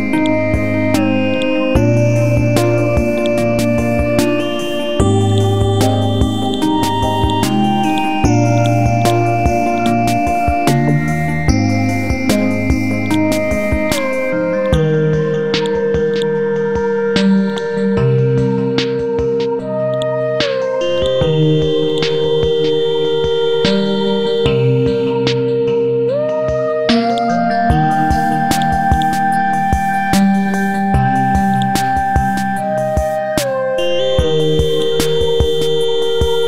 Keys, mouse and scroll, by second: 1.3 shift+click, 2.3-3.3 typing, 3.1 click, 3.5 scroll down 1, 5.3 click, 6.4 shift+click, 7.2 shift+click, 7.9 click, 8.6 right click, 9.0 click, 10.5 ctrl+z, 10.9-11.7 scroll up 1, 12.3 ctrl+u, 13.1 click, 15.2 Delete, 15.6 click, 16.7 scroll down 1, 17.5 click, 18.8 scroll up 1, 19.9 click, 23.0 scroll up 1, 24.3 shift+click, 27.1 click, 28.0 scroll down 1, 28.6 click, 29.9 scroll up 1, 30.5 ctrl+g, 31.5 click, 32.5 KP_9, 32.8 KP_0, 34.0 scroll down 1, 34.7 click, 35.9 scroll up 1.